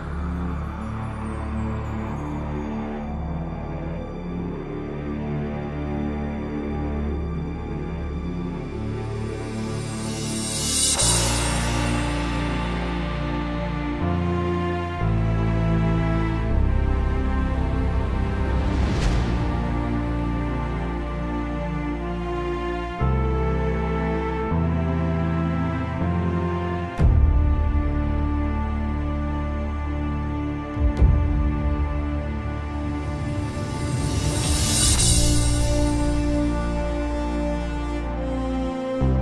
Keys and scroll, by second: 1.3 z, 3.7 z, 6.9 z, 27.3 ctrl+z, 27.7 ctrl+z, 30.0 ctrl+z, 30.7 z.